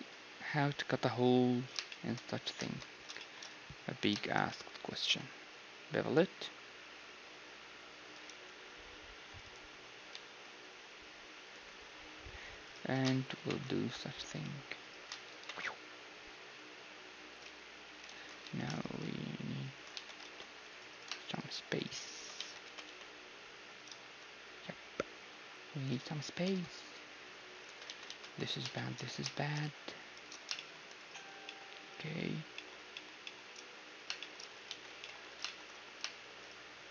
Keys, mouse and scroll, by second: 2.0-5.7 middle drag, 2.6 ctrl+space, 2.9 z, 3.9 z, 4.9 ctrl+b, 8.3 t, 9.3-13.4 drag, 10.7 z, 12.2 z, 12.7-14.5 right drag, 12.9 z, 13.4 ctrl+shift+b, 14.8-16.7 right drag, 17.4 z, 18.1 ctrl+z, 19.9 right click, 19.9 a, 20.2 ctrl+Tab, 21.2-24.0 right drag, 22.4 z, 22.7 s, 26.4 ctrl+Tab, 26.4 z, 27.7 ctrl+z, 27.9 ctrl+z, 28.1 ctrl+z, 28.5-36.9 middle drag, 31.0-32.9 right drag, 32.6 alt+shift+e, 34.7 z, 34.9 b, 35.3 z, 36.4-36.9 right drag.